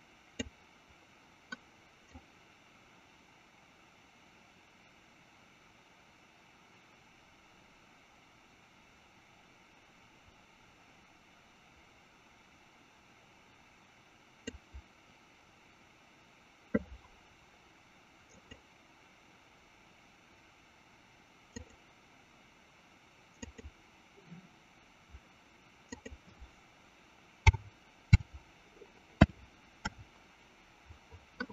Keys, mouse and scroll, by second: 2.5-15.7 drag, 19.3 click, 22.9 click, 23.7 click, 26.1-31.5 drag.